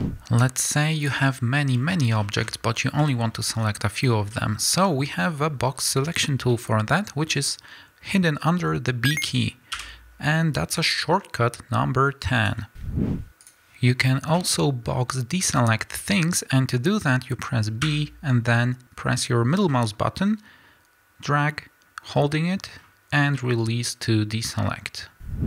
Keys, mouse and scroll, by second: 0.7 middle click, 1.0 click, 1.9-2.8 middle drag, 2.5-3.1 scroll up 2, 3.1-12.8 shift+middle drag, 3.7-4.0 scroll down 2, 6.0-6.5 scroll down 2, 9.7 b, 13.4 click, 14.8 middle click, 14.8 scroll down 2, 15.3 scroll up 1, 15.9-17.8 scroll down 1, 17.8 b, 23.3-25.4 middle drag.